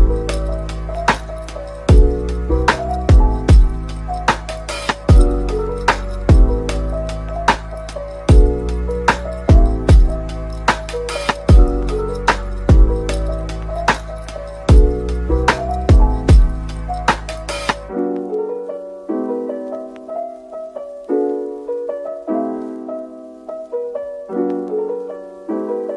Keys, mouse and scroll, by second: 1.0-4.0 scroll up 1, 5.8 shift+click, 10.2-10.6 scroll down 1, 11.9 shift+click, 13.8-15.8 scroll down 1, 15.8 Tab, 16.1 middle click, 17.0 Tab, 17.9 shift+click, 18.6 ctrl+l, 21.5-23.2 scroll down 1, 23.2 scroll up 1.